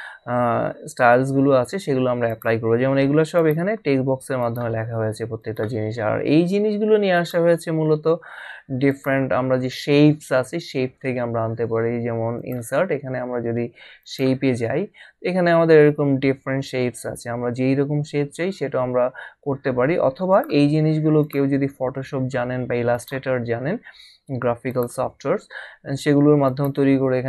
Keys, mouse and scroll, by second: 2.3 click, 7.2 click, 8.9 click, 12.4 click, 14.0 click, 20.3 click, 22.9 click, 24.7 click, 26.4 click.